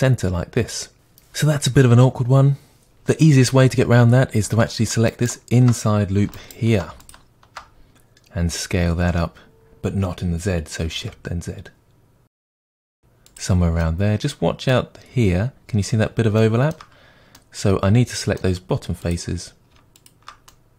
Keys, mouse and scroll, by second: 0.9 right click, 5.1 alt+right click, 6.3 alt+right click, 7.0 alt+click, 8.4 s, 13.3-19.0 middle drag, 17.0-17.3 scroll up 2, 19.0 click, 20.0 shift+click, 20.5-20.7 middle drag.